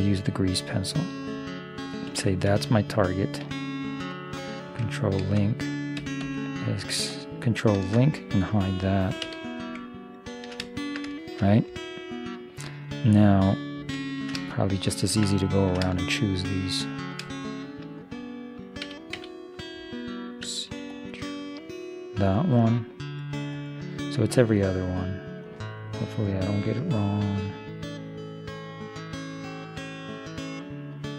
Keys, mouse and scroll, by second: 2.9-4.7 middle drag, 7.8 ctrl+l, 9.3 h, 10.0 middle click, 11.2 middle click, 11.5-13.0 middle drag, 14.0 middle click, 18.9 a, 19.3 a, 20.5 c.